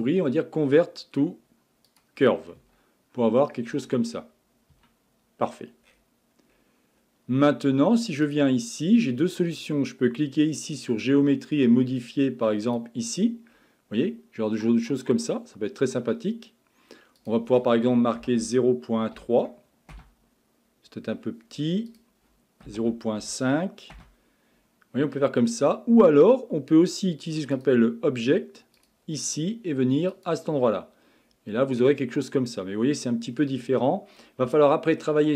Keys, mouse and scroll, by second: 2.6 Tab, 3.2-4.7 scroll up 21, 4.7 Tab, 5.5-6.5 scroll down 16, 6.5-7.0 scroll up 4, 7.0-8.3 scroll down 1, 8.3 click, 12.6 click, 13.5-14.1 scroll up 5, 14.1 scroll down 1, 14.2-14.7 scroll up 1, 14.7 scroll down 2, 15.0-17.2 scroll up 1, 17.2-20.3 drag, 21.9-24.9 drag, 24.9 scroll up 2, 25.1-26.1 scroll down 5, 26.1-27.5 scroll up 2, 27.5 click, 28.8 click, 30.9-31.3 scroll up 6, 33.3-34.5 scroll down 5, 34.5-35.3 shift+middle drag.